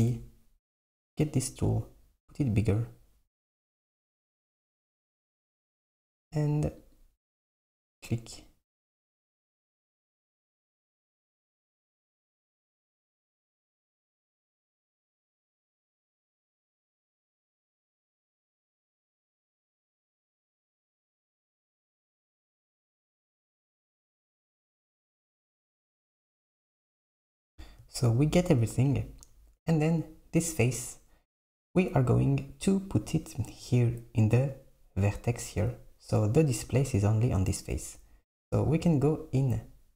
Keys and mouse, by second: 9.4 shift+click, 9.9 shift+click, 10.8 shift+click, 11.4 shift+click, 12.2 shift+click, 13.1 shift+click, 13.7 shift+click, 16.5 shift+click, 17.0 shift+click, 17.5 shift+click, 18.2 shift+click, 19.0 shift+click, 19.6 shift+click, 20.4 shift+click, 21.4 shift+click, 22.5 shift+click, 23.4 shift+click, 24.1 shift+click, 24.6 shift+click.